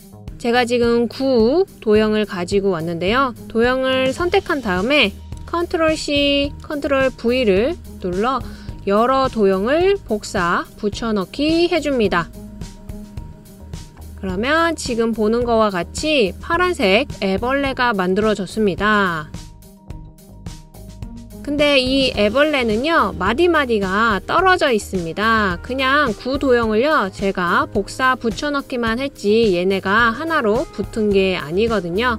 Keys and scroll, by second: 5.9 super+c, 7.0 super+v, 7.5 super+v, 7.9 super+v.